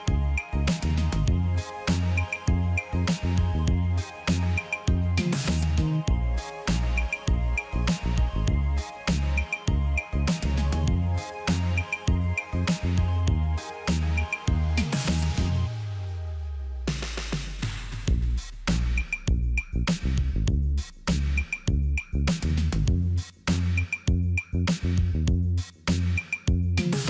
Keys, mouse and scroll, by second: 17.1 right click, 25.7 shift+click.